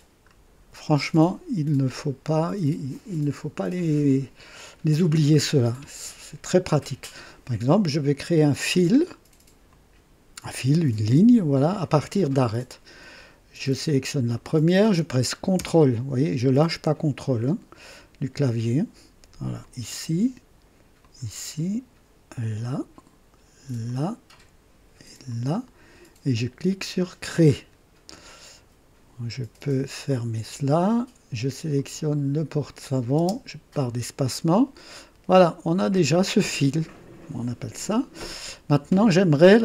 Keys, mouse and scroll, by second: 0.2 scroll up 1, 1.0-1.8 drag, 9.6 click, 14.3 click, 19.6 ctrl+click, 21.0 ctrl+click, 22.5 ctrl+click, 23.8 ctrl+click, 25.3 ctrl+click, 27.2 click, 30.0 click, 31.7 click, 33.2 space, 34.2 click, 38.5-39.6 drag.